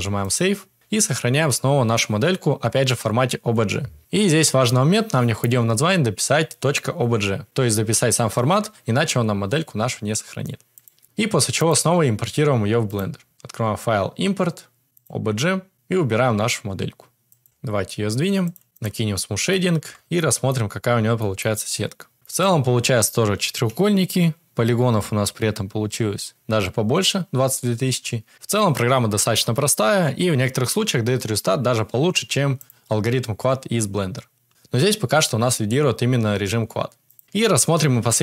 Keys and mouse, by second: 12.8-15.1 drag, 17.4 g, 24.0 a, 32.6 click, 37.1-38.2 drag.